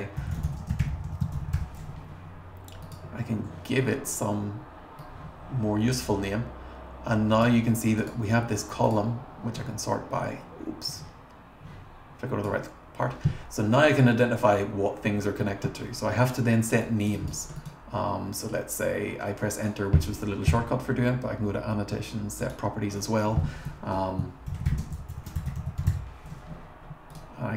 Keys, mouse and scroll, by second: 0.0-2.0 typing, 2.8 click, 3.9 scroll up 2, 5.0-7.4 drag, 8.0 click, 8.8 click, 9.6 scroll down 1, 10.9-12.4 drag, 16.8 click, 17.2 click, 17.5 right click, 22.4 click, 24.2-26.5 typing, 27.1 click.